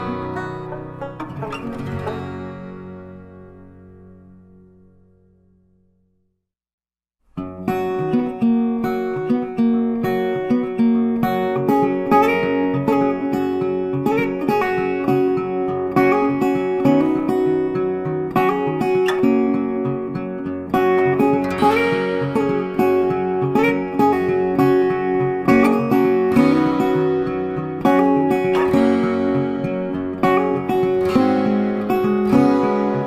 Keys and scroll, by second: 2.2 Delete, 3.8 ctrl+d, 8.4 Delete, 9.8 ctrl+d.